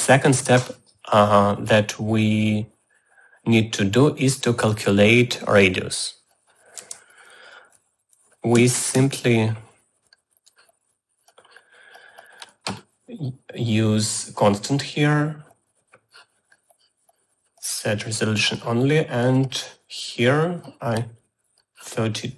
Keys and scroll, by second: 7.5 Tab, 8.6-9.7 typing.